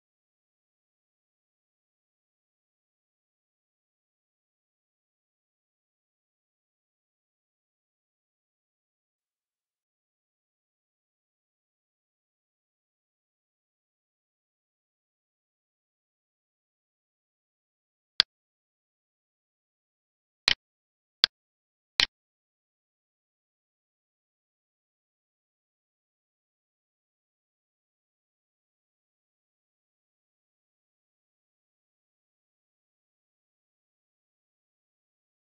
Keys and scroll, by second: 0.9 End, 1.5 Left, 4.1 Escape, 4.7 Down, 6.2 ctrl+s, 9.9 alt+e, 15.3 alt+e, 29.7 alt+e.